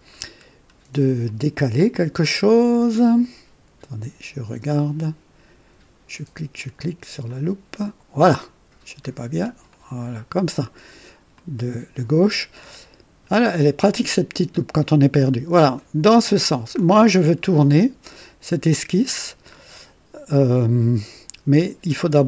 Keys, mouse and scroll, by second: 0.0-0.7 scroll down 4, 1.2 right click, 7.2 click, 8.3 right click, 9.1-9.5 scroll down 2, 9.6 right click, 11.3 click, 15.2-15.7 scroll up 2, 15.7 right click, 16.7 scroll up 2, 17.2 right click, 19.4 scroll up 2.